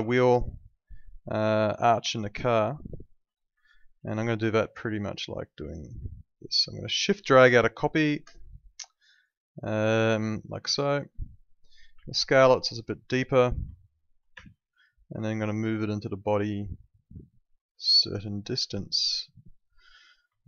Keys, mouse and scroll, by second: 0.1 alt+middle click, 3.2 middle click, 3.7 alt+middle click, 4.3 alt+middle click, 5.4 click, 6.1 alt+middle click, 7.5 shift+click, 10.2 click, 10.7 alt+middle click, 11.9 r, 12.7 click, 13.7 alt+middle click, 14.3 w, 15.7 click, 17.2 alt+middle click, 20.4 alt+middle click.